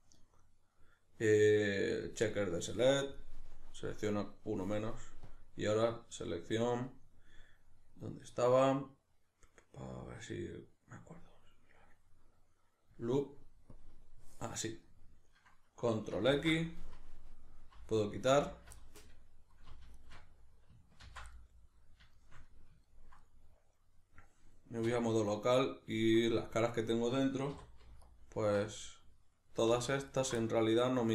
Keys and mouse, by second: 3.2-5.3 middle drag, 5.3-14.8 drag, 14.8-16.8 middle drag, 16.3 ctrl+x, 17.9 alt+right click, 18.8-20.0 middle drag, 20.0 alt+shift+right click, 21.1 ctrl+x, 21.3-28.1 middle drag, 24.9 \, 27.5 3, 28.1 alt+right click, 28.7-30.1 middle drag, 30.1 alt+shift+right click, 30.4-31.1 middle drag.